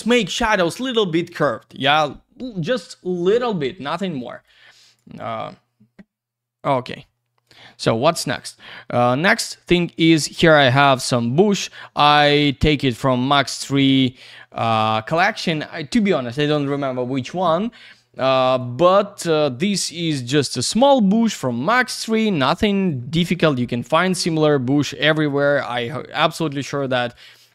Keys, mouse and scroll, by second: 4.2 click, 4.8 click, 5.2 click, 5.2 double click, 7.4 click, 7.9 middle click, 8.4-8.8 typing, 9.1 scroll down 1, 9.4 alt+middle click, 10.2 alt+z, 10.3 click, 11.0 click, 13.7 x, 14.2 click, 15.2 alt+middle click, 15.3 alt+z, 15.5 click, 17.8 alt+middle click, 18.6 click, 19.6 alt+middle click, 20.0 F4, 20.4 alt+space, 20.5 alt+w, 21.0 middle click, 21.7 alt+middle click, 21.9 alt+z, 22.0 click, 23.4 click, 24.2 F3, 24.6 middle click, 25.1 F3, 26.8 alt+z, 27.0 click, 27.2 alt+middle click.